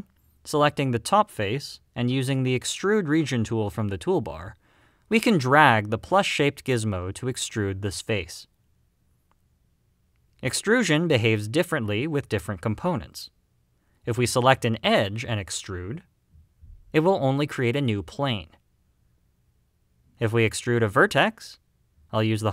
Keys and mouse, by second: 1.0 click, 4.9-7.0 drag, 10.0 middle click, 11.5 shift+middle click, 12.2 middle click, 14.3 click, 16.9 click, 19.2-20.2 middle drag, 21.2 click, 22.1 click.